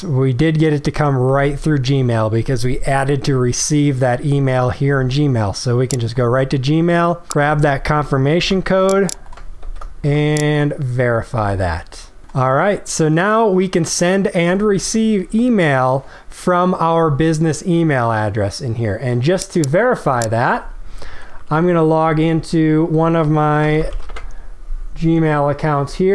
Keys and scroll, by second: 8.3 ctrl+c, 10.0 ctrl+v.